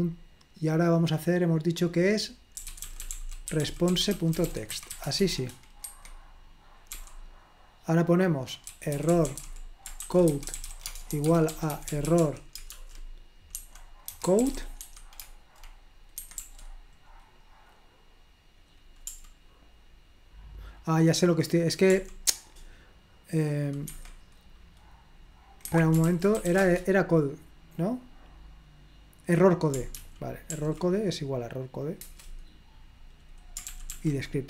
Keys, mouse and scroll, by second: 2.4-5.7 typing, 5.8 Escape, 7.0 o, 8.5-15.3 typing, 16.2 Escape, 16.3 u, 22.0 o, 23.9 Escape, 25.7 Escape, 26.0-27.0 typing, 30.0 ctrl+p, 30.5 ctrl+p, 32.1 Return, 33.7 ctrl+p, 33.9 ctrl+p.